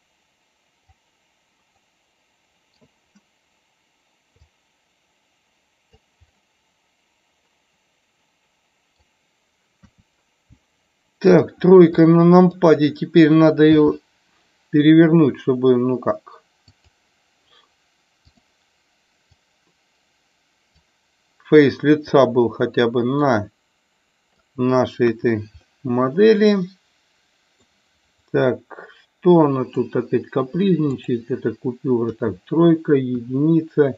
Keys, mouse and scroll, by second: 1.9-2.9 middle drag, 4.5-5.9 drag, 6.4-9.0 middle drag, 9.9 KP_3, 11.2 click, 12.0 click, 16.7 click, 18.2 click, 19.4-20.7 drag, 22.2-24.4 drag, 25.1 KP_1, 25.6-26.2 middle drag, 26.4 middle click, 26.9-27.6 middle drag, 28.2-29.7 middle drag, 31.0 click, 32.0 KP_3, 33.1 KP_1.